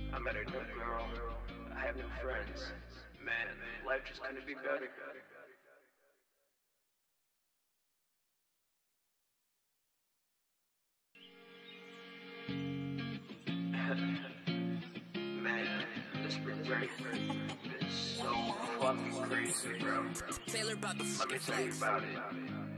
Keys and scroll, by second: 2.9 F4, 8.1 Return, 8.3 Return, 10.0 space, 10.3 super+s, 20.4 ctrl+shift+-, 21.4 super+s.